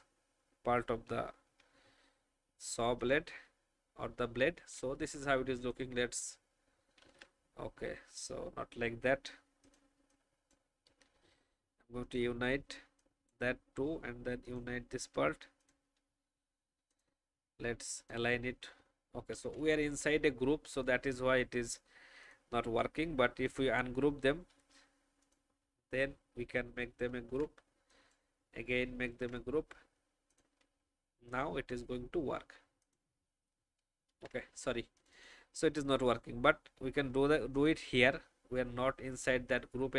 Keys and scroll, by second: 7.0 ctrl+z, 19.3 ctrl+z, 27.1 ctrl+g, 29.0 ctrl+g, 34.1 ctrl+z.